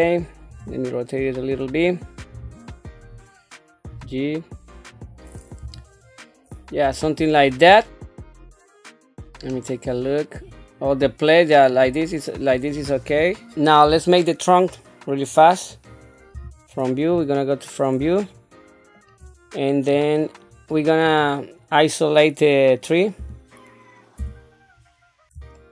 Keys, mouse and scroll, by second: 0.5 r, 2.3 r, 3.9 g, 5.6 KP_1, 7.0 shift+middle click, 7.8 middle click, 8.7 click, 9.1 middle click, 10.4 click, 10.8-12.8 drag, 15.7 click, 16.3 KP_1, 17.1 scroll up 2, 18.2 shift+middle click, 20.0-20.3 scroll down 1, 20.5 scroll up 1, 21.0 click, 23.2 -, 24.2 /, 25.5 shift+middle click.